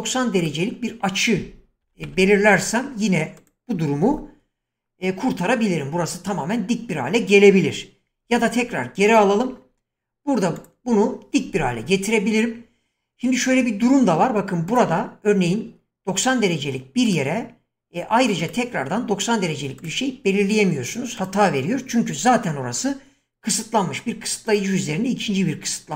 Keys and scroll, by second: 1.5-2.5 typing, 8.2 ctrl+z.